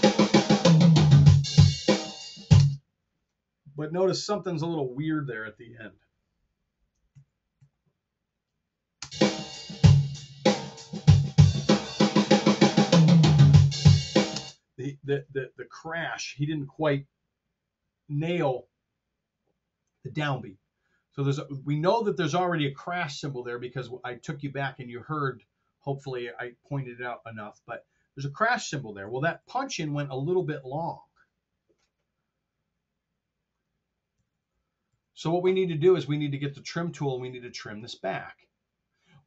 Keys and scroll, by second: 2.6 space, 5.5 r, 7.1 super+z, 8.9 space, 14.3 space, 29.3-30.9 typing, 34.2 t, 34.8 r.